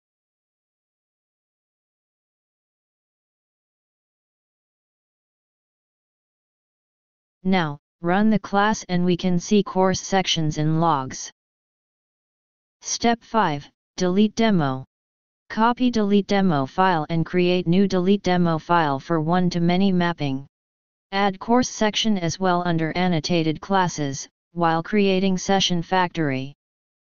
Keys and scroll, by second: 5.5 ctrl+s, 23.1 ctrl+c, 25.6 ctrl+shift+o.